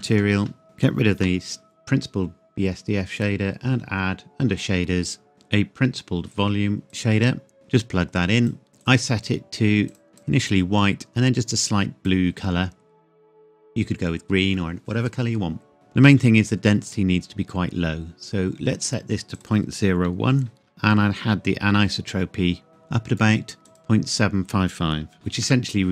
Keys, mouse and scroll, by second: 0.0-0.1 typing, 0.5 Return, 0.6 click, 1.2 Delete, 3.2 click, 6.9 click, 16.8-18.5 scroll up 1, 19.4 click, 20.2 KP_Decimal, 20.6 KP_0, 20.9 click, 25.1 KP_5, 25.5 KP_Enter.